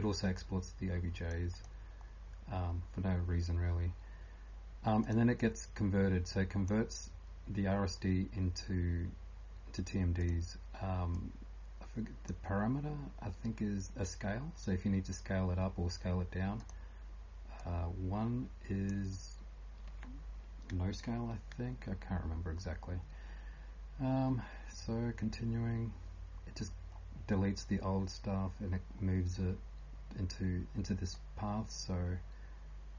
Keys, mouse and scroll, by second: 0.0-32.9 typing, 0.4 click, 2.1 click, 2.1 scroll down 1, 5.0 click, 22.2 scroll down 1, 23.9 scroll down 1, 26.9 scroll down 6, 27.5 scroll down 1, 28.9 scroll down 1, 29.4 scroll down 1, 31.1 click.